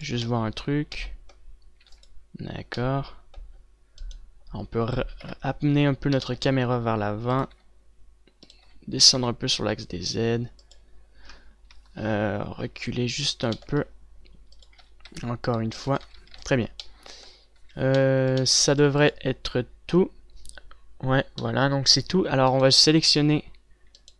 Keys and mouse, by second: 2.7 ctrl+s, 5.8 KP_0, 7.2 g, 8.4 g, 9.7 g, 12.6-14.5 drag, 14.5 g, 15.6 click, 15.6 g, 16.8-17.1 a, 17.3 ctrl+s, 18.5 a, 18.7 a, 19.6 ctrl+s.